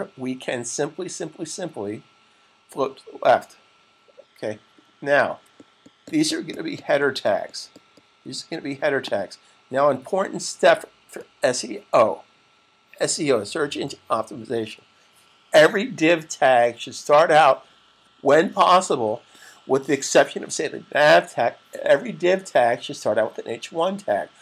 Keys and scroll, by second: 4.5 super+s.